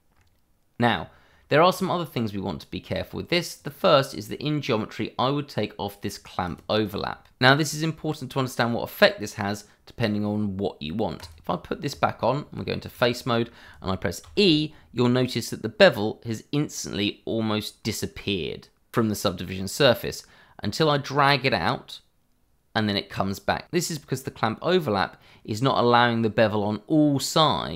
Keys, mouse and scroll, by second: 1.7 click, 4.2 scroll down 1, 11.2 click, 11.9 Tab, 12.9 click, 14.2 e.